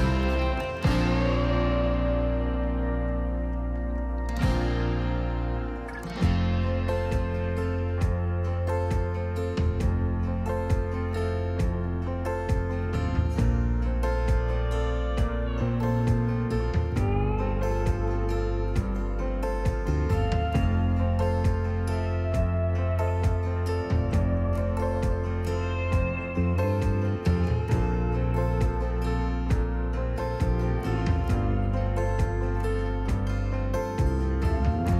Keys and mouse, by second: 2.1 click, 4.0 Tab, 4.7 click, 5.8-8.5 alt+s, 10.1 Tab, 12.2-12.8 drag, 16.4 click, 21.0 ctrl+p, 23.2 g, 23.4 z, 25.2 click, 25.8 KP_1, 27.4 g, 27.7 z, 29.1 click, 29.9-30.5 drag, 32.0 shift+a, 34.7 s.